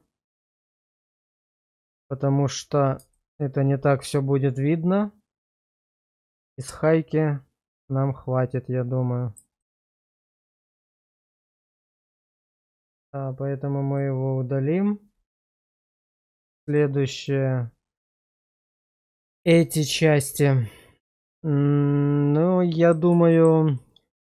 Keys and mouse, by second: 0.7 click, 3.1 shift+middle drag, 4.1-9.4 middle drag, 9.6 shift+middle click, 10.5 shift+middle drag, 12.3 click, 14.0 click, 15.4 shift+middle click, 16.7 click, 17.2 click, 18.5 shift+middle drag, 19.4-22.9 middle drag, 23.3 shift+middle click, 23.8-24.2 middle drag.